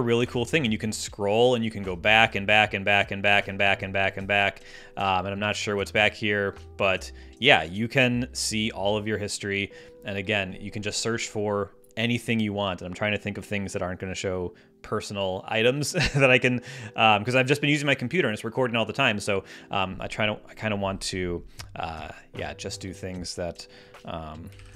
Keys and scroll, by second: 24.1-24.7 typing.